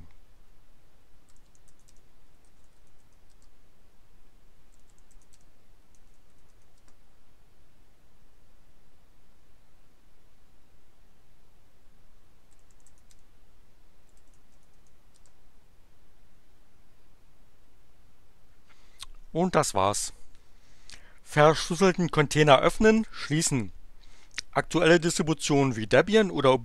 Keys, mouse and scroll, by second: 1.0-3.5 typing, 4.5-7.0 typing, 12.3-15.2 typing.